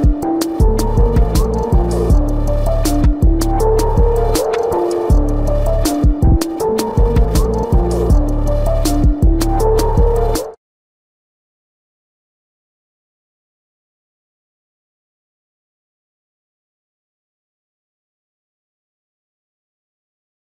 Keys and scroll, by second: 20.2 a.